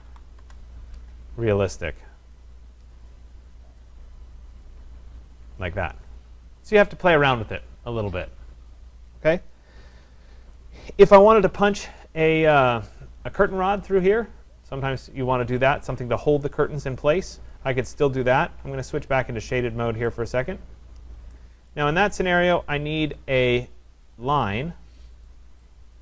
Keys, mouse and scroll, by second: 0.0-0.5 typing, 2.5 click, 3.9 click, 4.7 click, 6.9 right click, 10.6 right click, 11.1-11.4 scroll, 12.3 right click, 13.6 middle click, 18.3 click, 19.1 click, 19.6 scroll, 20.4 right click, 20.7 scroll, 21.7 right click, 21.9 Escape, 22.1 Escape, 23.3 click, 25.3 click, 25.7 middle click.